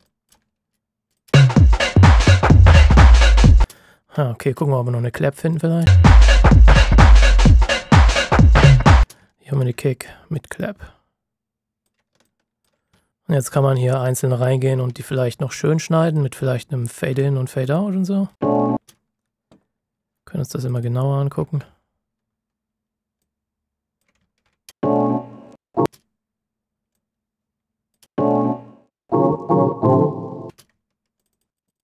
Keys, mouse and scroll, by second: 0.0 alt+click, 1.3 space, 1.8 ctrl+shift+scroll down 1, 3.6 space, 3.8-5.5 ctrl+shift+scroll down 2, 5.5 click, 5.8 space, 8.6 ctrl+shift+scroll up 1, 8.9 space, 9.2 ctrl+shift+scroll up 1, 10.3 ctrl+click, 12.2 alt+click, 13.0 shift+scroll down 1, 13.1 click, 14.0 ctrl+shift+scroll up 1, 14.9-16.0 scroll up 1, 16.0 click, 16.8 ctrl+shift+scroll up 1, 18.3 space, 20.6 click, 21.7-22.5 ctrl+shift+scroll up 1, 22.5 click, 24.3-24.6 ctrl+shift+scroll down 2, 24.6 space, 25.2-25.8 ctrl+shift+scroll down 2, 25.8 space, 26.9 click, 28.0 space, 29.7-30.1 ctrl+shift+scroll down 1, 30.3 ctrl+scroll up 2, 30.4 space, 31.1 ctrl+click.